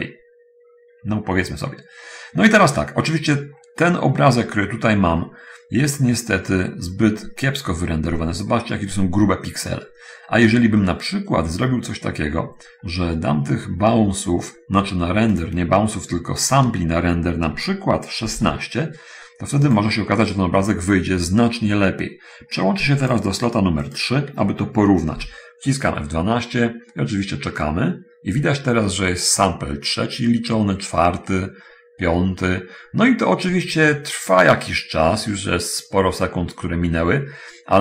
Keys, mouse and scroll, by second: 0.4 scroll up 1, 1.4 middle click, 3.9-4.5 scroll up 1, 4.5 scroll up 1, 4.6 scroll down 1, 4.8-5.1 scroll up 1, 5.3-6.3 middle drag, 8.2-8.8 scroll up 1, 8.8-9.7 scroll down 1, 9.7 middle click, 10.6 middle click, 11.1 middle click, 12.4-13.8 scroll up 1, 14.0 scroll up 1, 14.2 middle click, 15.6 click, 18.6 1, 18.6 6, 20.0 click, 24.0 click, 25.4 F12.